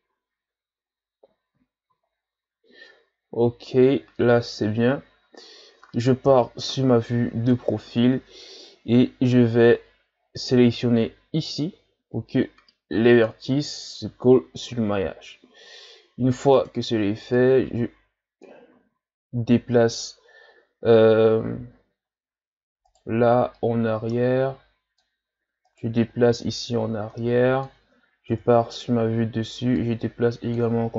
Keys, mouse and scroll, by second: 0.3-2.6 scroll down 1, 2.6-3.0 scroll up 1, 6.2 KP_3, 7.4-8.3 shift+scroll up 4, 8.5 Tab, 10.4-11.6 drag, 13.2 click, 16.6 right click, 17.4-18.8 drag, 18.8 ctrl+z, 21.2-22.9 ctrl+scroll down 8, 22.9 right click, 23.5-25.6 drag, 25.6 right click, 26.4-28.3 drag, 28.3 KP_7, 29.8-30.9 drag.